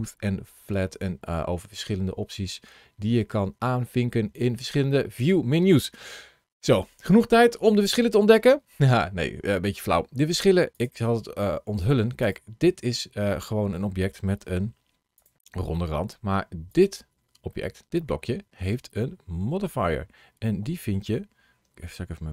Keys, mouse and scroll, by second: 4.7-5.2 scroll down 1, 5.2-7.5 scroll up 1, 7.5 middle click, 10.6 click, 12.1 click, 14.3 g, 15.0 click, 16.5 click, 17.4 middle click.